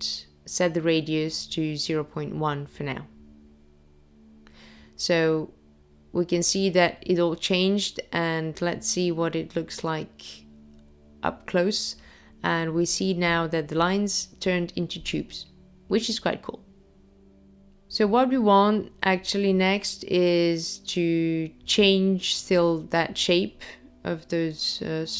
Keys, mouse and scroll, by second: 5.8 click, 7.1-7.8 scroll up 2, 7.8 scroll up 1, 8.4-9.1 scroll down 1, 9.1 scroll up 1, 9.9 middle click, 13.2-13.8 scroll down 1, 14.0-15.0 scroll down 1, 15.0 middle click, 16.8-17.5 scroll down 2, 21.8-22.6 scroll up 1, 22.6-24.5 scroll up 1.